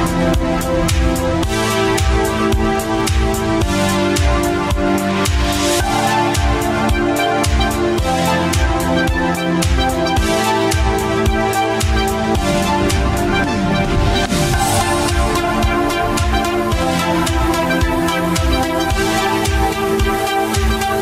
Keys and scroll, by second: 3.3 q.